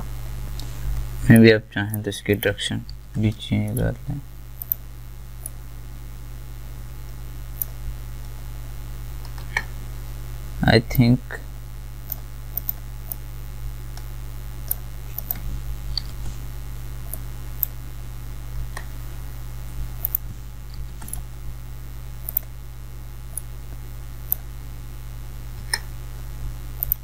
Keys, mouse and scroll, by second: 1.3 alt+Num_Lock, 1.3 click, 3.7 right click, 4.6 click, 4.6-10.9 drag, 10.9-20.0 drag, 20.0 click, 21.1 right click, 22.3-25.3 drag.